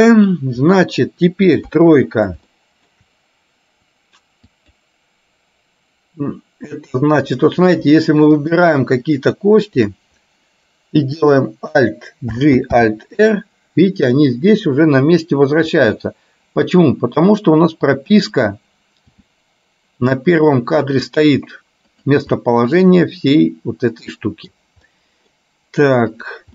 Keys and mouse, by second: 1.9 KP_3, 2.6 middle click, 8.5 shift+click, 9.2 shift+click, 9.7 shift+click, 12.5 alt+g, 12.9 alt+r, 15.9 r, 19.4 g, 22.5-24.5 middle drag, 25.1 middle click, 26.2 click.